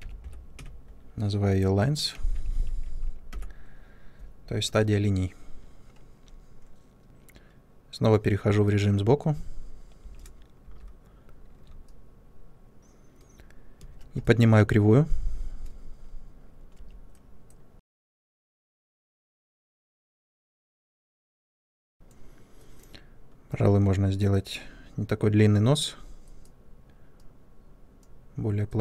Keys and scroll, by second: 2.2 typing, 9.9-10.5 typing, 13.7 space, 16.7 1, 18.0 w.